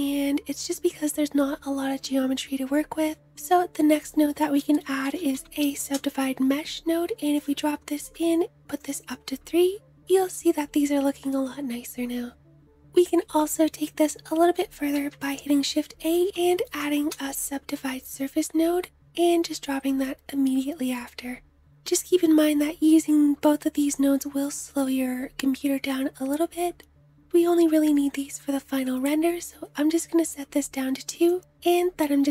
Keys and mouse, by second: 2.9 shift+click, 3.1 shift+a, 5.5-8.5 drag, 8.5-19.2 middle drag, 14.5 shift+a, 16.3 Down, 19.2-20.4 drag, 30.8 click, 31.6 m.